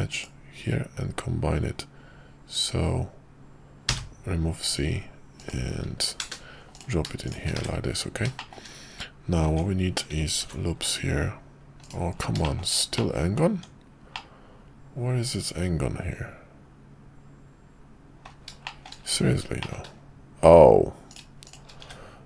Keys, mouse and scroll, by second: 6.7 click, 7.6 1, 8.3 shift+middle click, 8.5 shift+scroll down 1, 9.5 Tab, 10.4 ctrl+r, 12.4 shift+middle click, 12.9 middle click, 13.5 Tab, 14.1-18.3 middle drag, 18.6 shift+middle click, 19.6 shift+middle click, 21.1 click, 21.4 shift+click, 21.9 1.